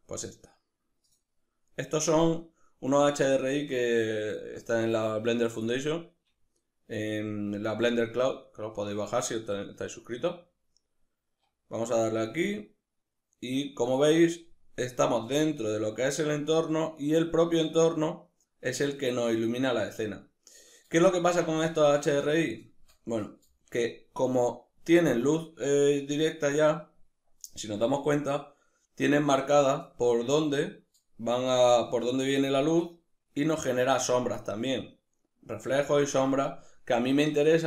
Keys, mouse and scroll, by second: 10.1 z, 13.9 scroll down 1, 14.4 scroll up 1, 15.0-37.6 middle drag, 20.9-21.4 scroll up 2.